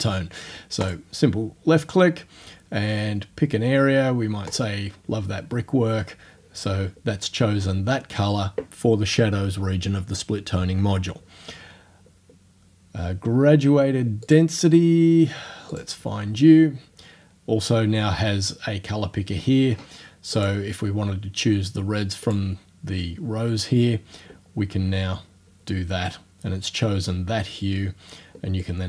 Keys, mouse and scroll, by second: 0.9 click, 4.5 click, 14.3 click, 15.7 click, 20.4-22.1 drag, 22.3 click, 28.6-28.8 drag.